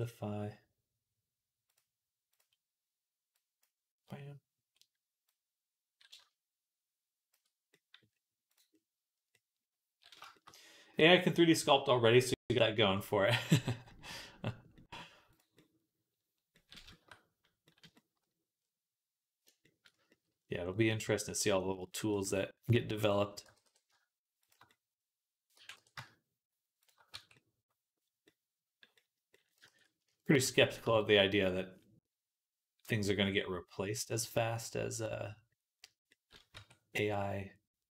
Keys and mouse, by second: 5.1-8.4 drag, 16.7 shift+middle click, 17.7 shift+middle click, 19.3-37.9 shift+right drag, 22.1 Tab, 23.3 g, 25.4 g, 26.9 Tab, 29.6 ctrl+s, 30.7 Tab, 34.0-36.4 drag, 36.4 Tab.